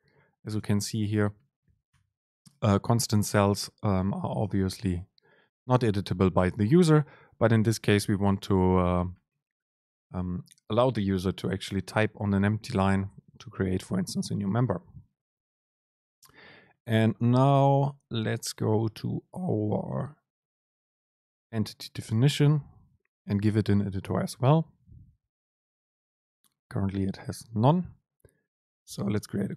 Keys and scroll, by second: 0.7 super+space.